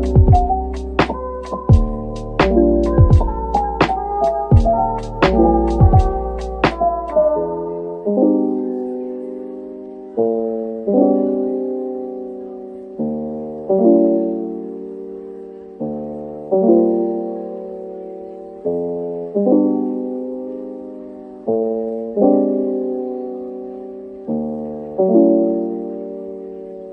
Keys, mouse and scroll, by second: 2.6 middle click, 3.6-4.9 scroll up 1, 7.5 scroll down 1, 8.4 /, 8.9 scroll up 1, 9.3 middle click, 12.1 typing, 19.4 shift+click, 23.1 typing, 24.7 typing, 25.2 ctrl+j, 26.5-26.9 scroll down 1.